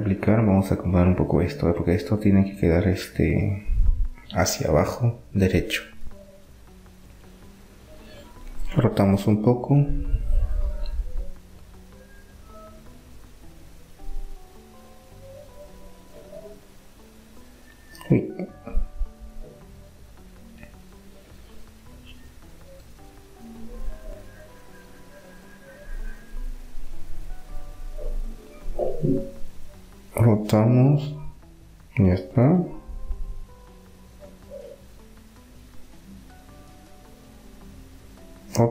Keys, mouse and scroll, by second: 3.2-5.0 right drag, 5.2-6.9 right drag, 6.5 r, 11.9 s, 14.9 s, 19.5 s, 24.0-27.9 drag, 27.9-30.2 right drag, 29.7 r, 33.0-34.8 middle drag, 34.8-37.5 right drag, 37.2 r.